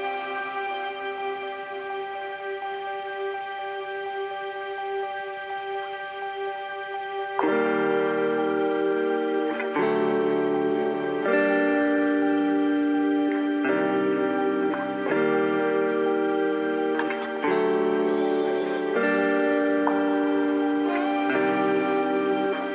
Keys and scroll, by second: 13.8 space.